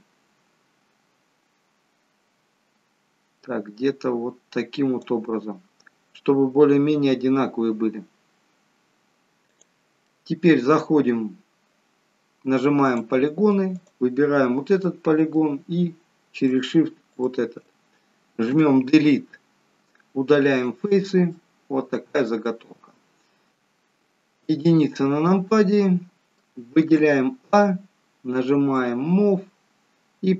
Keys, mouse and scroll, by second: 9.4 click, 10.0 middle click, 12.9 click, 13.9 click, 14.8 middle click, 17.1 shift+click, 19.4 Delete, 21.7 middle click, 22.6-23.5 scroll down 2, 23.5 click, 25.4 shift+KP_1, 25.7 shift+middle click, 27.0 a, 29.3-30.0 scroll down 1.